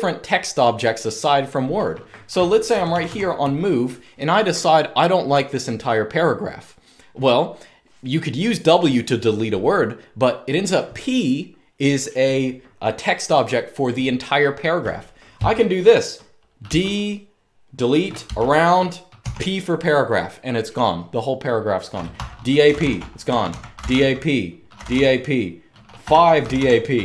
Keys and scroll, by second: 2.4-2.8 typing, 16.3 typing, 17.9-18.9 typing, 21.6-27.0 typing.